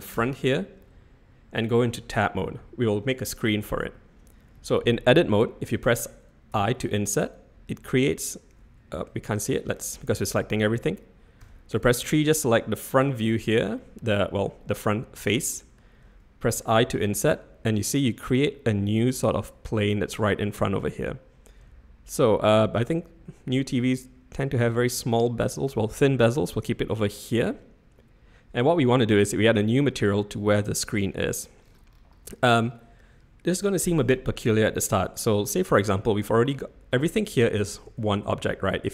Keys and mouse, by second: 0.1 Tab, 9.5 click, 11.4 3, 11.8 click, 12.2 middle click, 14.0 middle click, 15.3 middle click, 37.8 Tab.